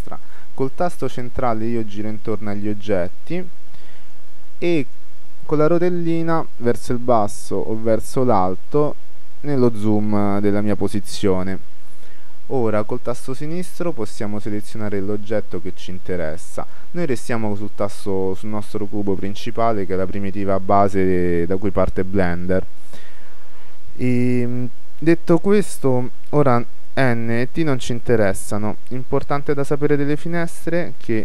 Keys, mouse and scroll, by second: 0.8-2.4 middle drag, 3.1-6.4 middle drag, 6.4-7.2 scroll down 1, 7.2 middle click, 8.0-8.4 scroll up 1, 8.4-9.3 scroll down 1, 9.3-10.2 scroll down 1, 10.2-11.8 middle drag, 13.7-16.8 right drag, 17.8-19.0 right drag, 20.5-22.4 middle drag, 27.1 n, 27.5 t.